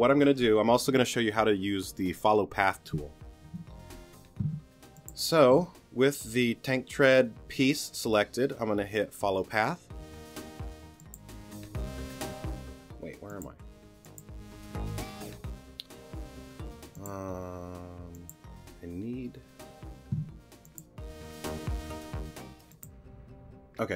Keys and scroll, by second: 4.4 t, 20.2 t.